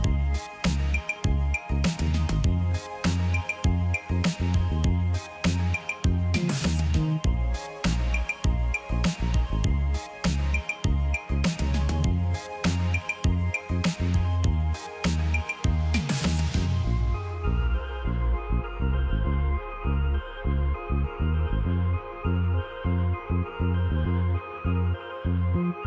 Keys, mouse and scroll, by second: 7.7 1, 8.3 Return, 17.3 ctrl+click.